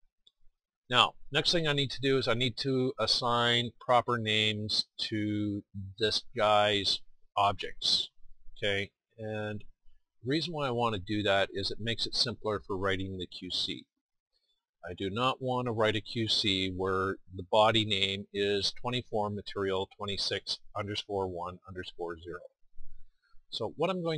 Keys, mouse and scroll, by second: 8.7-10.0 middle drag, 12.7-24.1 middle drag.